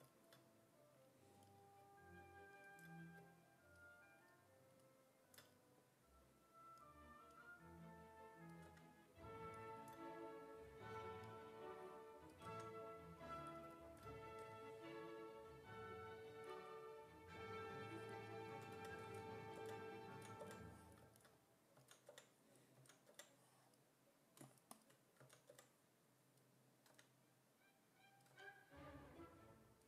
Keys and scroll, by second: 8.7 w, 12.5 w, 14.4 r, 18.3-20.4 typing, 21.8 s, 22.1 5, 22.8 s, 23.1 5, 25.2 s, 25.5 5, 26.9 w, 28.3 w.